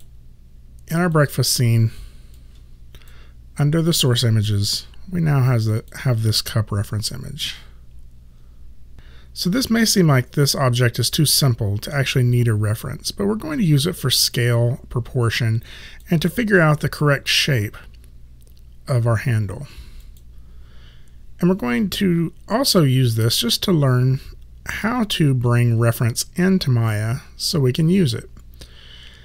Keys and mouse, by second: 20.1 click, 20.3 click, 23.3 click, 25.1 click.